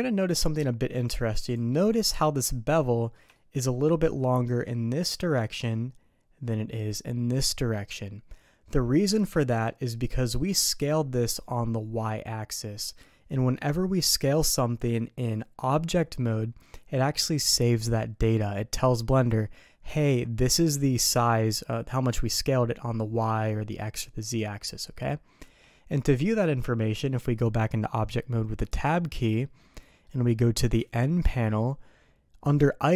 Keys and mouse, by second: 1.7 middle click, 2.9 middle click, 3.3 shift+middle click, 9.3 ctrl+z, 10.4 middle click, 25.4 Tab, 29.8 middle drag, 30.8 n.